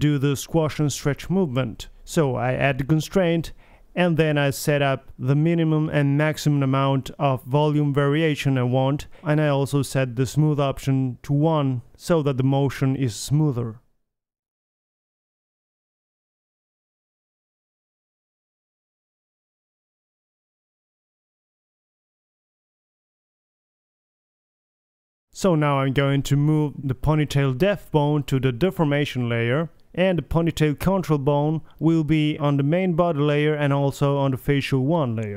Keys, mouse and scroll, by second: 16.0 g, 19.0-19.3 middle drag, 19.0 r, 19.4 g, 20.9 alt+g, 21.0 alt+r, 21.2 alt+s, 21.2 alt+a, 21.4 KP_3, 22.8 r, 24.2 click, 24.3 KP_3, 25.0-26.0 middle drag, 26.0-26.5 drag, 26.0 m, 29.7-31.1 drag, 30.5 m, 32.7 m.